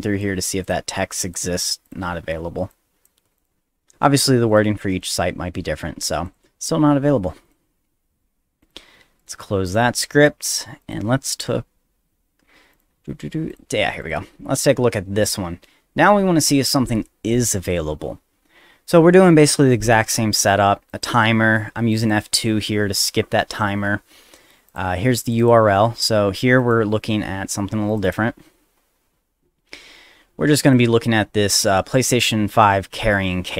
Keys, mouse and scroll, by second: 0.6 click, 1.1 click, 1.8 click, 2.7 click, 3.4 click, 4.5 click, 5.0 click, 6.3 click, 7.4 click, 8.6 click, 9.2 right click, 9.7 click, 10.8 click, 12.7 click, 13.5 click, 14.0 click, 14.8 middle click, 20.9 click, 21.9 click, 24.7 click, 25.2 click, 25.4 click, 26.6 ctrl+click, 27.9 ctrl+click, 28.0 ctrl+click, 28.4 z, 30.7 click, 31.4 middle click, 31.4 scroll down 1.